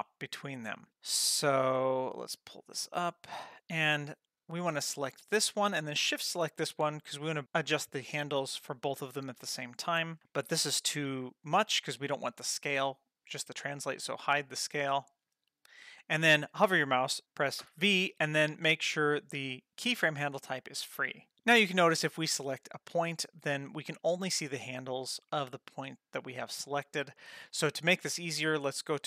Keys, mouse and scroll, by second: 2.4 click, 4.9 click, 6.0 shift+click, 13.8 click, 14.3 click, 17.2 Escape, 17.2 v, 17.6 v, 21.3 ctrl+z, 22.4 click, 26.2 click.